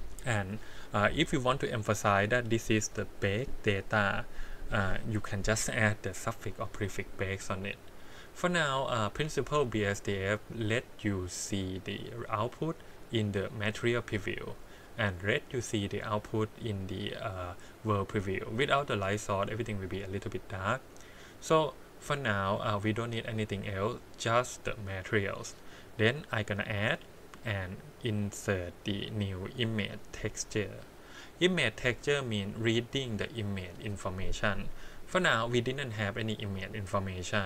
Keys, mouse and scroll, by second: 2.1-8.0 drag, 8.6 middle click, 9.2-11.4 scroll up 5, 11.4 middle click, 12.7-13.0 middle drag, 13.0 click, 13.1-14.4 middle drag, 16.0 click, 17.3 middle click, 21.4 click, 23.8 click, 25.4 middle click, 26.5-31.3 drag, 31.3-32.1 scroll up 1, 32.1-32.6 scroll up 5, 32.6 scroll down 1, 32.7 middle click.